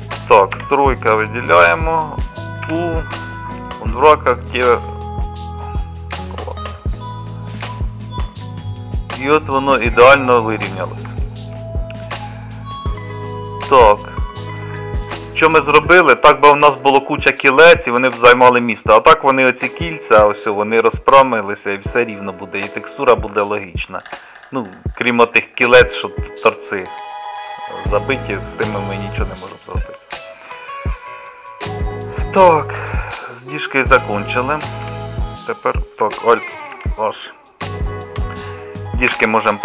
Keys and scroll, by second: 34.9 KP_Divide, 36.8 alt+h, 36.9 KP_Divide, 39.2 h.